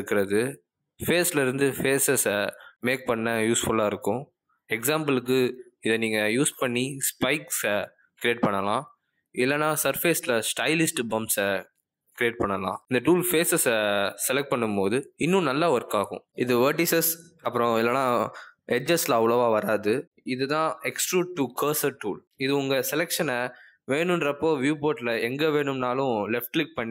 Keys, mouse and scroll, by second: 1.0 click, 3.6 click, 5.8 s, 7.7 middle click, 13.2 ctrl+z, 13.2 click, 16.9 ctrl+z, 18.6 shift+click, 19.4 click, 25.0 click, 26.0 click, 26.8 click.